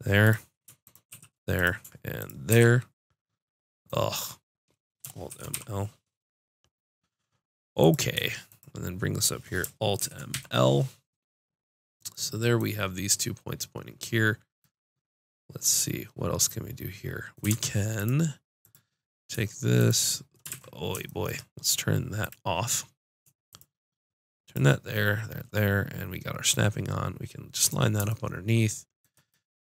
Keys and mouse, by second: 1.1 shift+r, 2.5 r, 5.2 alt+m, 9.9 alt+m, 17.4 ctrl+Tab, 18.6-21.9 drag, 20.4 ctrl+z, 22.1-23.7 drag.